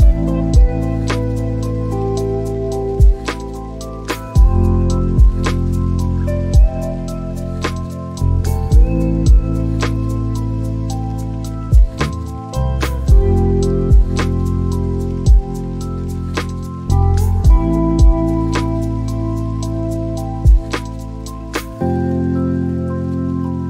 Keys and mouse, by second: 7.7 drag, 11.2 shift+d, 13.4 click, 14.7 click, 16.4 g, 19.9 click.